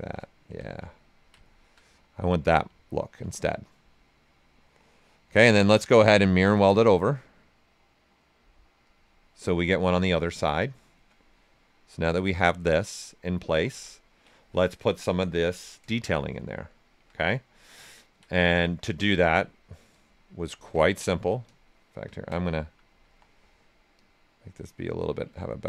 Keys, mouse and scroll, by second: 0.4 q, 0.8 ctrl+right click, 1.8 right click, 3.5 right click, 4.1 typing, 4.3-6.0 right drag, 6.0-8.8 drag, 8.8 click, 9.4-11.8 right drag, 11.8-13.7 right drag, 15.7 right click, 17.4-20.5 ctrl+right drag, 20.5 shift+f, 21.2 ctrl+click, 21.4 ctrl+space, 23.0 w, 23.9-25.3 drag, 25.3 ctrl+click.